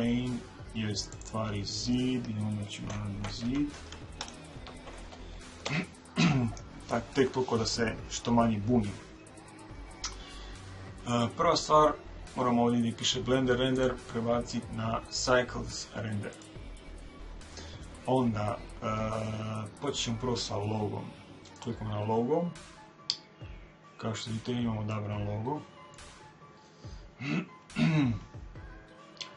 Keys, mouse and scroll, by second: 13.7 click, 21.5 click, 22.9 middle click, 23.1-24.9 scroll up 1, 24.9-26.7 middle drag, 26.6-27.2 scroll up 1, 27.2-29.3 middle drag, 27.6-28.0 scroll up 1, 28.0 scroll down 1, 28.2-29.1 scroll up 1, 29.1 scroll up 1.